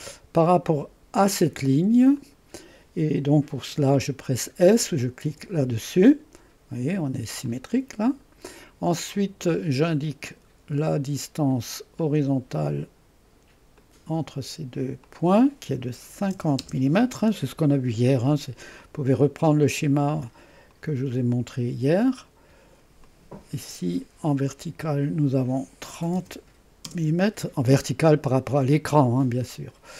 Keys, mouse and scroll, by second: 2.2 click, 5.3 s, 7.2-8.0 typing, 7.5-9.0 drag, 12.0 click, 13.8-16.0 drag, 16.2-16.5 typing, 16.6 Return, 18.8 click, 19.2-19.8 typing, 20.7-21.7 drag, 23.0 click, 24.9-26.0 drag, 24.9 typing, 26.0-26.9 typing.